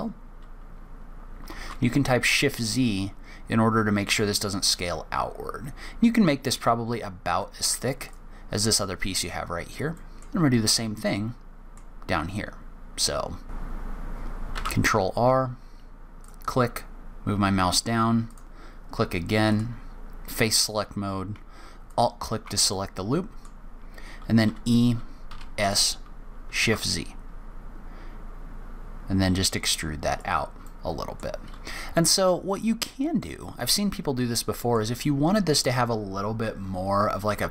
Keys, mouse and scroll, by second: 9.3-9.9 scroll down 3, 9.9 middle click, 9.9-10.3 scroll down 1, 10.3-11.0 scroll up 3, 11.0 middle click, 13.8 click, 14.1 middle click, 14.3 middle click, 14.5 ctrl+r, 19.5 click, 21.9 alt+click, 22.7 middle click, 24.4 e, 30.6 middle click, 31.4-32.5 scroll down 3, 31.9 middle click, 32.5 middle click, 34.0-34.3 scroll up 1, 34.3 middle click.